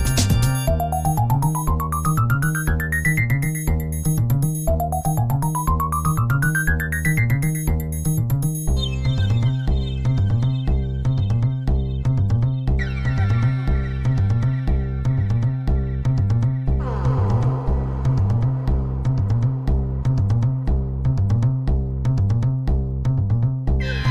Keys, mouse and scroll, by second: 2.3-5.5 drag, 8.5-13.0 drag, 13.5-15.8 drag, 16.4 click, 17.6-20.2 drag, 21.0-24.1 drag.